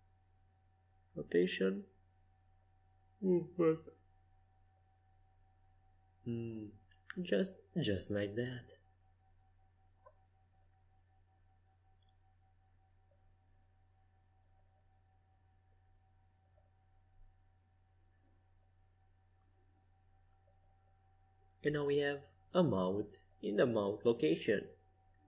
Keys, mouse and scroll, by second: 1.2 r, 3.0 g, 5.9 r, 9.8 a, 22.9-25.2 middle drag.